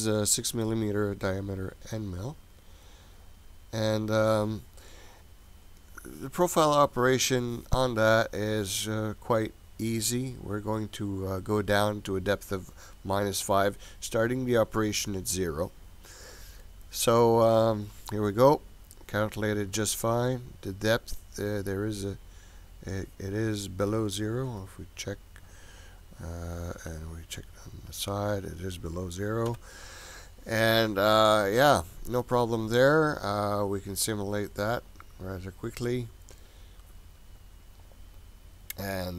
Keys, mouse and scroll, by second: 6.3-8.6 scroll up 12, 8.6-9.8 scroll down 2, 9.8-11.7 scroll down 6, 15.3-17.7 scroll up 9, 17.7 click, 19.7 scroll up 1, 19.8-23.9 middle drag, 24.4 KP_7, 27.4 KP_1, 29.5 KP_7, 30.6-31.1 scroll down 2, 31.1-32.3 middle drag, 34.9 click.